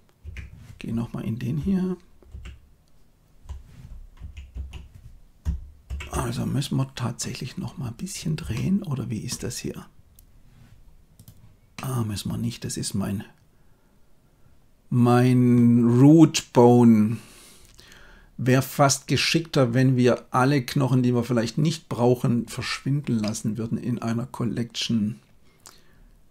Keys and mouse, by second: 0.1 Tab, 2.2 alt+g, 4.0 a, 4.4 a, 5.8 alt+g, 8.4-9.2 shift+drag, 11.6-15.4 middle drag, 23.1-26.3 middle drag.